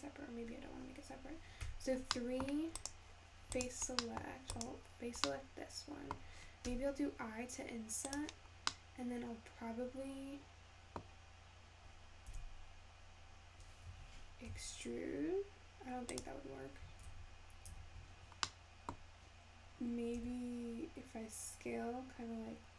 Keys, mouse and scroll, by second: 1.7 3, 2.2 middle click, 2.8 click, 3.5 click, 4.1 middle click, 4.6 click, 5.3-6.7 middle drag, 8.5 scroll down 2, 8.8-11.8 middle drag, 12.3 g, 14.5 e, 17.1 ctrl+z, 17.7 ctrl+z, 18.4 scroll down 1, 18.5 scroll up 1, 18.5 middle click, 19.3-20.2 scroll up 1, 20.2 s.